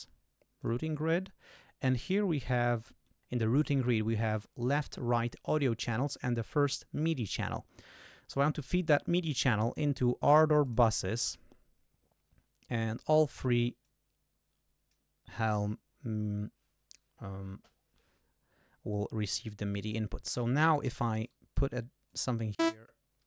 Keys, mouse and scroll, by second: 0.6 click, 2.6 click, 10.6 click, 13.8-15.1 drag, 19.8 click, 20.8 d, 21.2 click, 22.1 click.